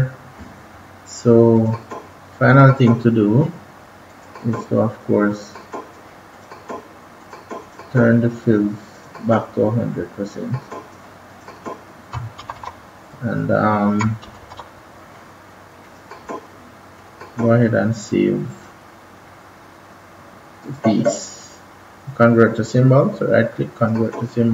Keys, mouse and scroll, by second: 0.6 scroll up 1, 1.0 scroll down 1, 1.5 click, 12.3 ctrl+-, 12.5 ctrl+-, 14.2 ctrl+=, 14.3 ctrl+=, 15.7 click, 19.2-19.6 scroll down 1, 19.7-20.5 scroll up 1, 20.5 right click, 23.7 click.